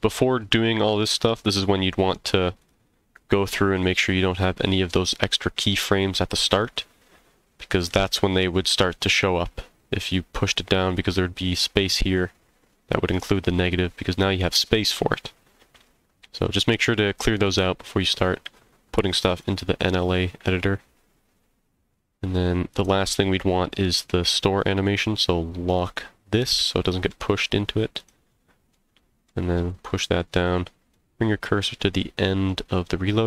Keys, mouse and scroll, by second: 1.3-2.7 drag, 5.5-8.0 middle drag, 19.3 click, 25.7 click, 26.3 middle click, 28.0 click, 28.7 middle click, 29.9 middle click, 30.9 click.